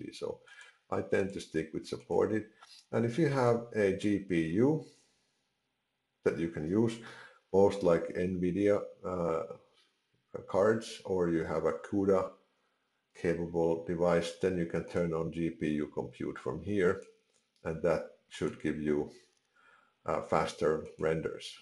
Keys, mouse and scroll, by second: 0.5 click, 2.0 click, 14.9 click, 16.9 click, 18.4 click, 20.8 click.